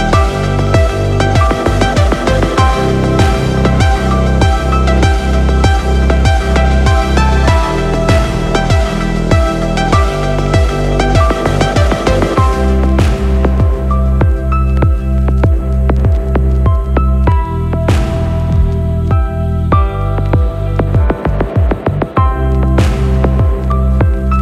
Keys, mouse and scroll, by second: 1.5 BackSpace, 5.5-6.3 right drag, 6.8 click, 8.4-9.9 right drag, 11.4 click, 14.8-16.8 drag, 17.6-23.5 shift+drag, 23.8-24.4 drag.